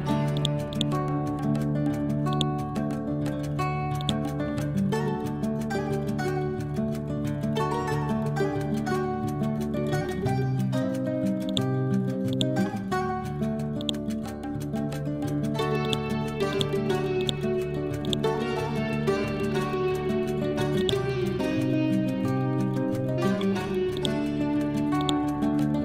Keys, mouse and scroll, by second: 0.8 right click, 2.4-11.5 drag, 15.9 right click, 16.6 click, 17.7 scroll up 1, 18.1 right click, 20.8 click, 21.4-22.1 scroll down 1, 22.4 scroll up 1, 24.0-25.8 drag.